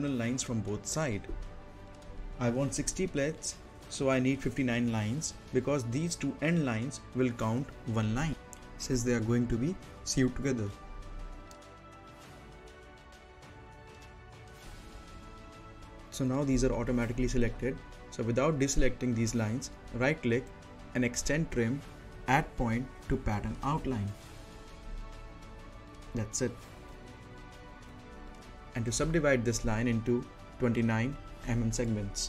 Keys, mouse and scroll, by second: 8.4-11.6 drag, 11.6-12.0 typing, 15.7-16.5 typing, 16.0 click, 19.0 click, 19.0-21.5 drag, 21.5 scroll down 1, 21.7 middle click, 22.1-22.4 scroll down 1, 22.4 middle click, 22.7-24.0 scroll down 1, 24.5 right click, 26.3 click, 29.8 middle click, 30.1-30.4 scroll down 1, 30.4 middle click, 31.8 click.